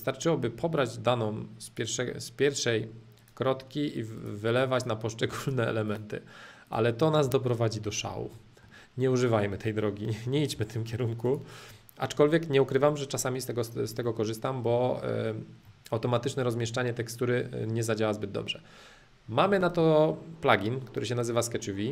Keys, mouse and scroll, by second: 0.7-2.7 drag, 3.1-5.1 drag, 5.4-7.2 drag, 7.2 space, 7.9-10.3 middle drag, 10.5 h, 11.2 click, 11.7-13.7 middle drag, 14.1-21.9 shift+middle drag.